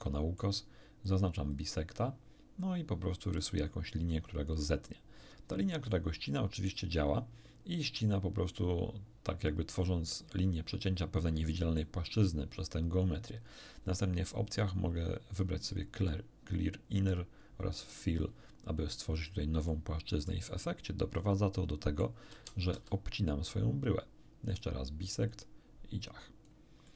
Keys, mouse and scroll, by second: 1.5 click, 2.5 click, 2.7-4.6 middle drag, 5.8-11.9 middle drag, 14.2-14.6 scroll down 1, 15.6 click, 17.7 click, 19.6-22.1 middle drag, 22.3 a, 22.7 a, 24.5 click, 25.3-26.6 drag, 26.8-26.9 middle drag.